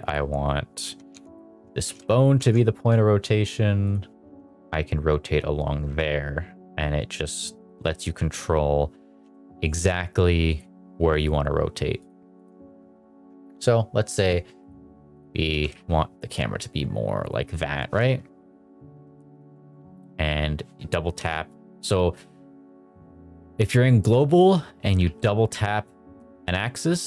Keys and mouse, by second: 1.2 ctrl+Tab, 1.2 drag, 1.8 shift+s, 2.5 ctrl+Tab, 3.8 click, 4.2 r, 4.5 z, 7.5 click, 8.1 shift+s, 10.5 click, 12.0-12.5 drag, 14.5-15.2 drag, 15.5 r, 15.8 z, 17.4 click, 18.9 g, 19.1 z, 19.4 z, 21.1 Escape, 24.1 click, 25.0 g, 25.5 z, 26.1 z.